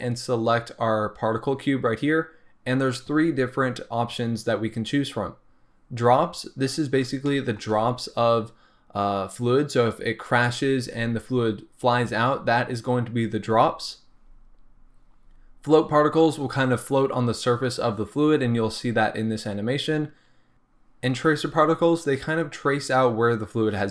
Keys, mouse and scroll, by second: 7.3-11.3 shift+middle drag.